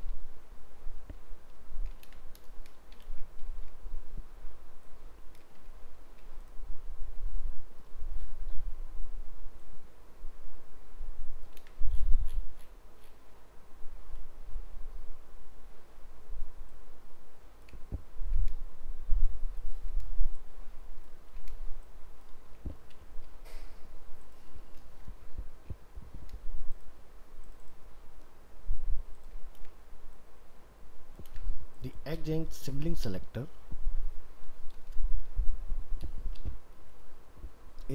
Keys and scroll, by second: 2.0 ctrl+c, 11.6 ctrl+c, 18.2 ctrl+v, 29.6 ctrl+c, 32.6 ctrl+Left.